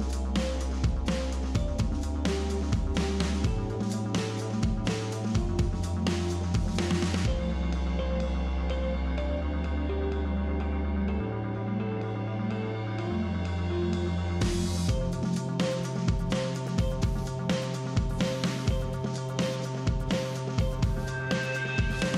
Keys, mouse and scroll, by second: 0.6 click, 2.0-2.9 drag, 4.5 click, 5.8-6.7 scroll down 6, 6.8-7.2 scroll up 2, 7.8-8.6 scroll up 1, 8.7 click, 9.1 click, 9.9 click, 10.9-12.6 scroll up 2, 13.6 alt+h, 17.2 click, 18.6 shift+click, 19.9 click, 21.4-22.1 drag.